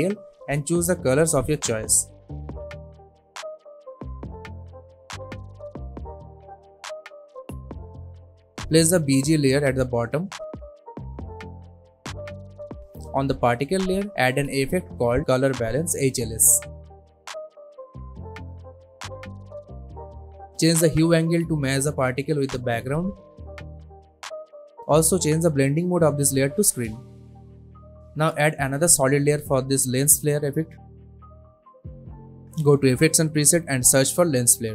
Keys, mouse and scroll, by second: 10.4 alt+scroll down 1, 11.4 alt+scroll up 1, 12.0 alt+scroll down 1, 12.4 click, 15.5-18.4 typing, 19.2-23.5 drag, 27.8 right click, 28.3 click, 30.0-31.8 typing, 33.2 click, 33.8-34.7 typing.